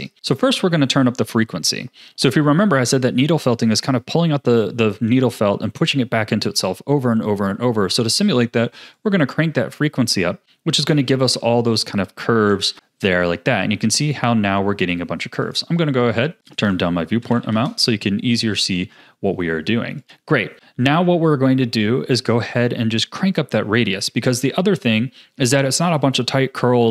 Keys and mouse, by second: 9.1-10.9 drag, 11.7-12.7 drag, 15.4 click, 16.5-17.6 drag, 20.0 click.